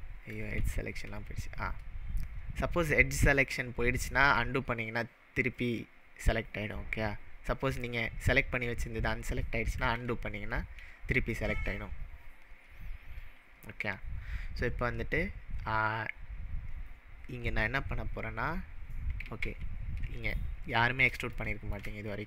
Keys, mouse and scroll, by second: 0.0-0.5 ctrl+middle drag, 0.6 ctrl+z, 1.9-3.5 scroll up 2, 7.8 click, 9.9 ctrl+z, 19.2 ctrl+z, 20.4 ctrl+z, 21.4-21.9 shift+middle drag, 22.1 scroll up 1.